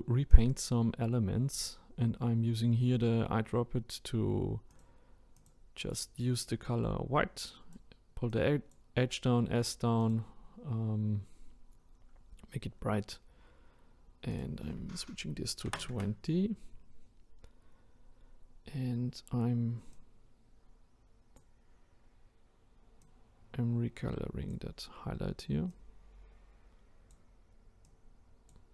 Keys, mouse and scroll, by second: 5.3 click, 10.0 click, 13.4-14.1 scroll up 2, 14.3-17.3 drag, 17.9-19.5 scroll up 1, 19.9-28.7 drag.